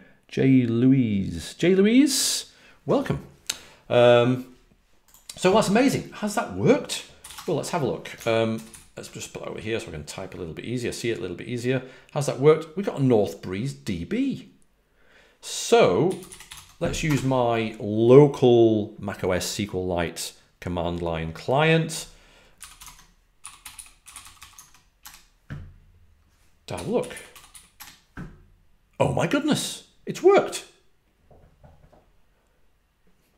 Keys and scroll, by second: 6.9-7.7 typing, 8.4 alt+super+Right, 8.6 alt+super+Right, 15.9-17.5 typing, 22.2-25.0 typing, 26.4-27.9 typing.